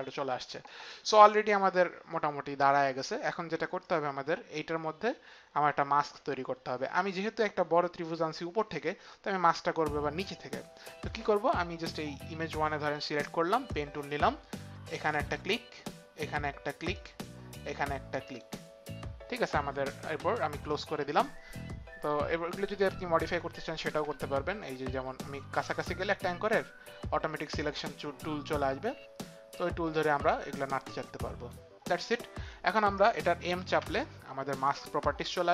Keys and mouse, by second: 1.1 click, 13.7 click, 32.9 click, 33.8 m.